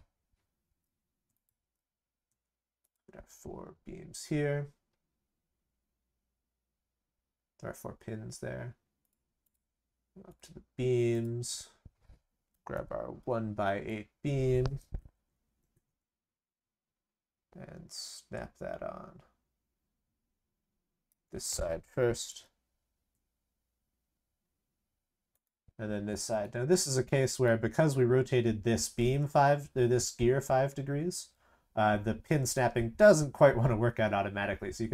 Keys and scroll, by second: 0.6 ctrl+v, 1.5 ctrl+v, 22.0 ctrl+c, 22.2 ctrl+v.